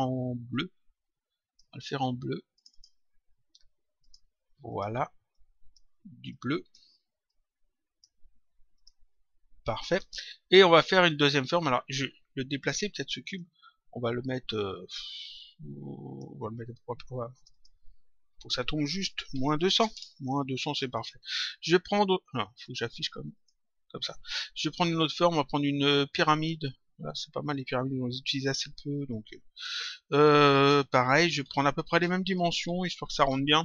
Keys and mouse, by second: 2.5 click, 3.9 click, 8.7 click, 9.8 click, 13.1 click, 14.5 click, 17.3 click, 19.9 Return, 20.8 click, 22.5 click, 24.7 click, 29.5 click, 31.0 click.